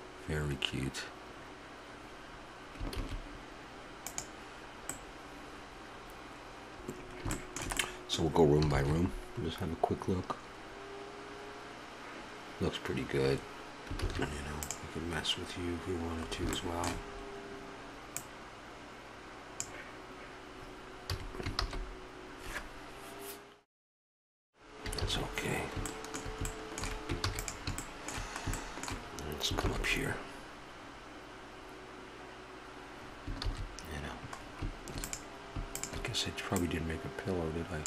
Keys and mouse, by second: 2.9 shift+z, 4.9-6.5 middle drag, 6.5 a, 8.7 shift+z, 14.0 shift+z, 14.6-16.2 right drag, 16.2 middle click, 18.2-20.0 drag, 21.1 a, 21.9 shift+z, 25.3 shift+z, 27.2 ctrl+s, 30.0 shift+z, 33.6 shift+z, 36.7-37.8 drag.